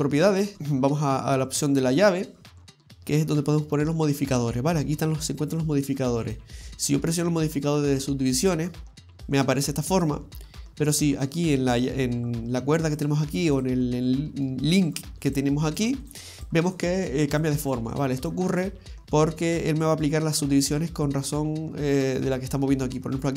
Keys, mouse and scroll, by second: 0.5 click, 1.6 click, 6.2 click, 12.9 click, 13.6 click, 15.3 click, 15.7 click, 16.0 click, 16.4 click, 16.7 click, 17.0 click, 17.4 click, 17.7 click, 18.0 click, 18.2 click, 18.6 click.